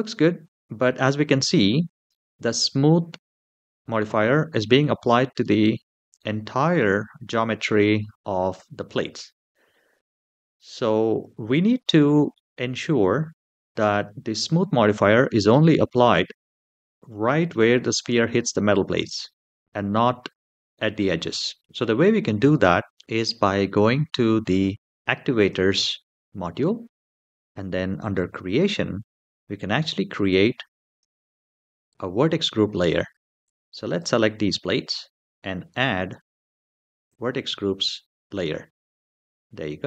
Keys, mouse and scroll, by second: 11.5-12.1 middle drag, 22.2-22.8 middle drag, 25.2 click, 27.8 click, 30.7 click, 33.2 click, 36.8 click, 39.5-39.8 middle drag.